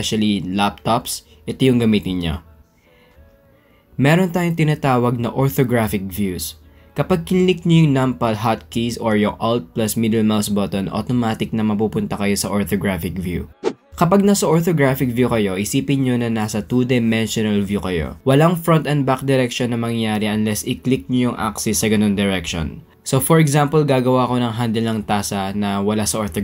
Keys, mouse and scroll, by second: 0.5-1.1 drag, 2.0-2.3 shift+middle drag, 2.8 middle click, 3.5 shift+middle drag, 7.3-8.3 shift+middle drag, 11.0 alt+click, 12.2 alt+drag, 13.7 KP_1, 15.8 click, 18.1 Tab, 18.8 click, 19.4 drag, 20.6 g, 23.5 Tab, 23.5 g, 23.8 click, 25.5 shift+click, 25.9 click.